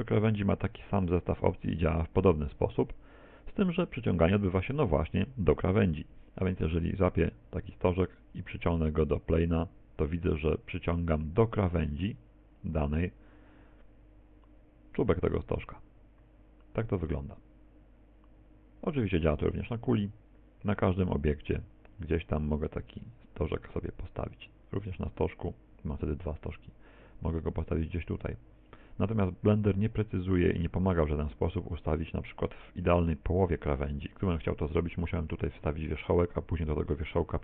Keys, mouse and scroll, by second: 0.2 click, 4.7 right click, 6.4 g.